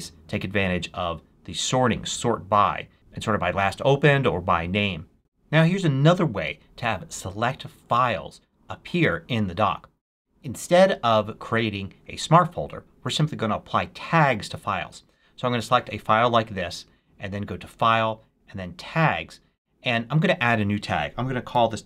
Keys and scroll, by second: 21.1-21.8 typing.